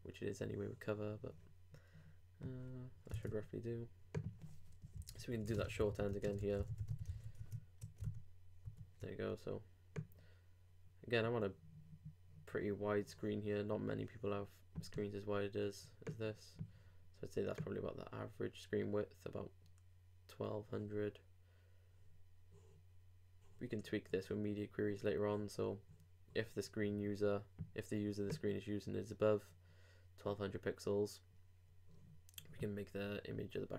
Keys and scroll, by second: 3.2 super+Tab, 7.1 super+r, 7.3 super+s, 7.4 super+Tab, 8.0 super+r.